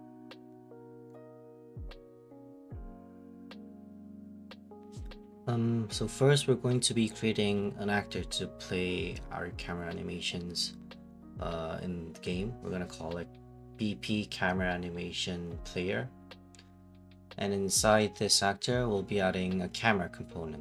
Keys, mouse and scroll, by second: 1.1 click, 3.1 right click, 5.1 click, 7.4 click, 7.7-14.2 typing, 14.9 ctrl+s, 15.3 Return, 16.7 click, 18.7-20.2 typing, 18.7 click.